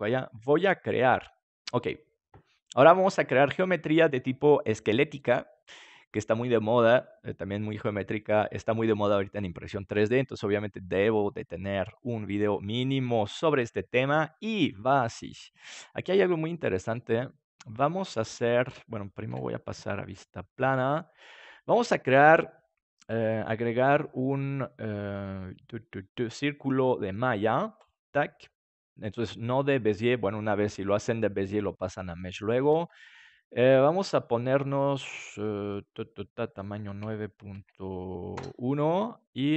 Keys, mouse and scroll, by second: 16.8 KP_7, 17.4-19.6 middle drag, 19.2 KP_5, 19.9 middle click, 22.1-24.7 drag, 27.7-29.6 drag, 36.5-38.9 drag.